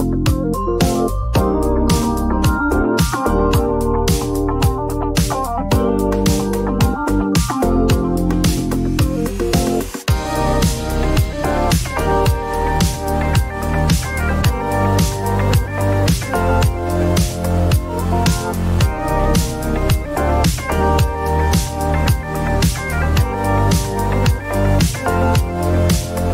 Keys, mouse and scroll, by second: 0.6 click, 1.0-1.8 typing, 3.9 click, 4.5 p, 6.7-8.1 drag, 8.3-10.3 drag, 8.5-9.4 typing, 15.7 click, 18.5 right click, 19.9 click, 21.1-23.4 typing, 24.8 click.